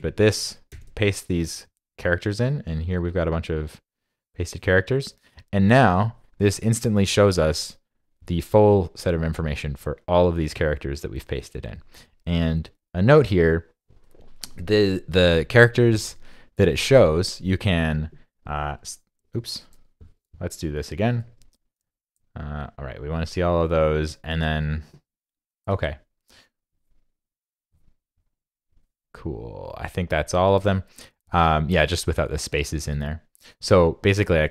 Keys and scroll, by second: 0.7 super+v, 21.3 super+a, 21.8 super+v, 25.7 super+a.